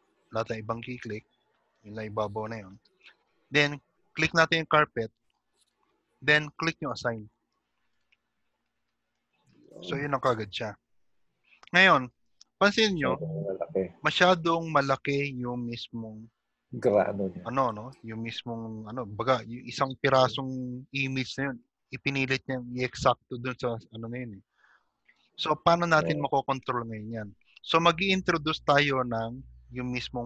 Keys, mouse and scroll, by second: 5.6 click, 8.0 click, 9.2 shift+middle click, 10.2 middle click, 13.0-13.3 scroll down 1, 13.8 middle click, 28.0 click, 28.5 scroll down 3.